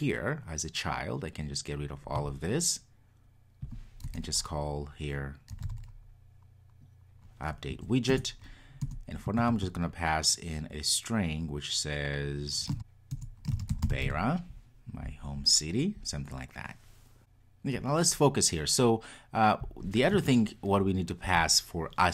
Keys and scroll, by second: 8.2 Return.